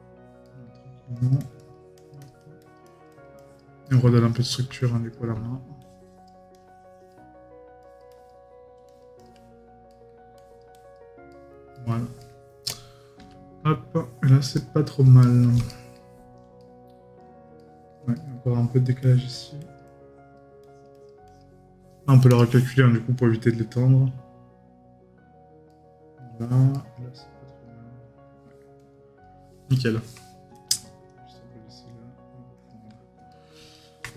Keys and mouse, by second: 3.8 right click, 9.9 right click, 11.3 right click, 15.2 right click, 25.7 right click, 28.4 right click, 29.7 right click, 33.3 right click.